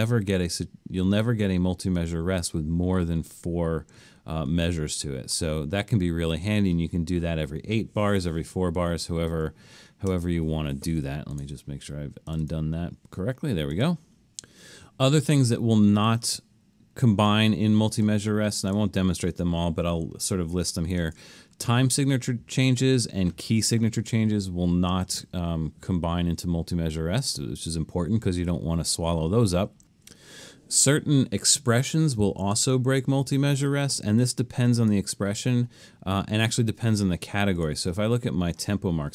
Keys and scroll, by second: 9.4 super+z, 10.1 super+z, 20.7 super+=.